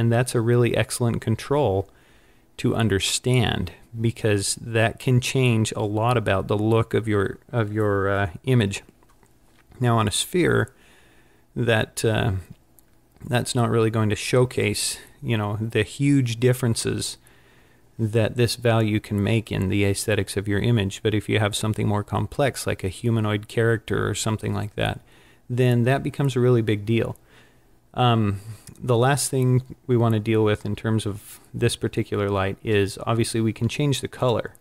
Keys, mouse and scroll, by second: 34.2 click.